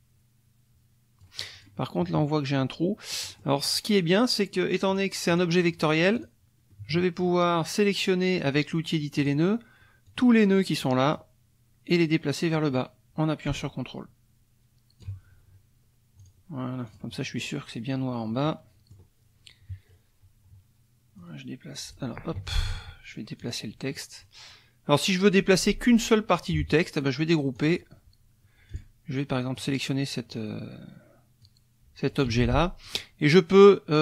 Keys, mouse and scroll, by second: 1.6 click, 3.1 middle click, 4.9 click, 5.3 click, 6.1 click, 6.7 middle click, 9.2 click, 10.0-11.3 drag, 12.5-15.2 drag, 16.2 click, 16.9 click, 18.4 middle click, 19.6 KP_Subtract, 21.2 click, 22.4 ctrl+z, 23.4 click, 27.6 click, 28.7 click, 29.5 click, 31.4 click, 32.3 ctrl+z, 32.8 ctrl+click.